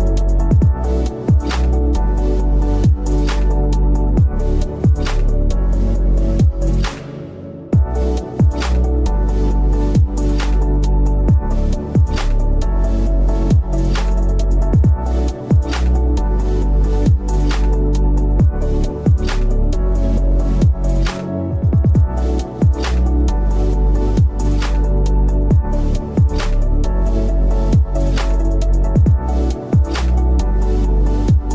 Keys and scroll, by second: 0.1 i, 0.4 v, 0.5 ctrl+[, 3.4 Delete, 5.1 a, 6.6 v, 10.0 p, 11.4 v, 11.9 v, 12.9 shift+m, 13.1 v, 14.3 shift+m, 14.6 v, 16.2 v, 18.2 Return, 19.8 v, 21.7 v, 24.3 v, 25.1 i, 25.2 v, 27.1 v, 27.2 ctrl+z, 28.9 ctrl+z, 29.1 i, 29.3 v, 30.2 i, 30.8 v.